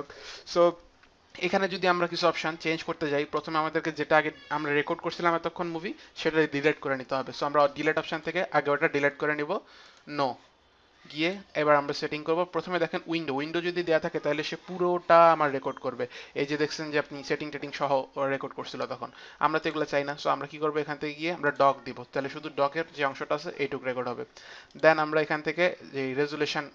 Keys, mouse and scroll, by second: 8.1 click, 9.8 click, 11.2 click, 19.6 click, 21.4 click, 24.7 click.